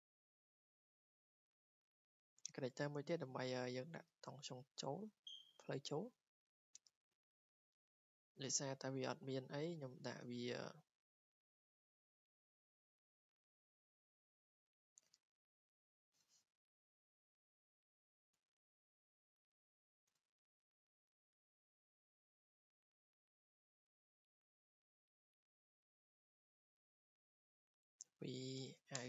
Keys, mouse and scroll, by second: 1.3 click, 5.6 click, 6.1 click, 6.3 Escape, 6.7-7.0 scroll, 7.3 scroll down 3, 8.3 w, 9.0 click, 10.2 Escape, 11.3 w, 11.9 click, 13.9 right click, 15.1 click, 15.9 click, 18.5 Escape, 19.5 click, 20.1 Delete, 21.3 w, 22.7 click, 24.7 right click, 25.6 click, 26.8 click, 27.1 Escape, 27.5 click, 27.6 click, 27.8-29.0 typing.